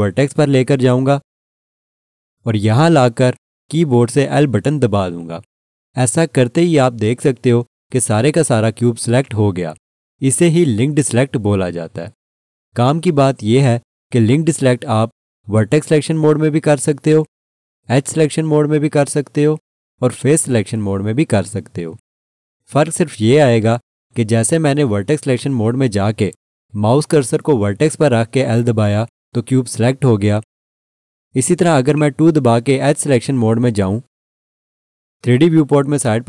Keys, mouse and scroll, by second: 4.4 l, 31.9 click, 32.8 2.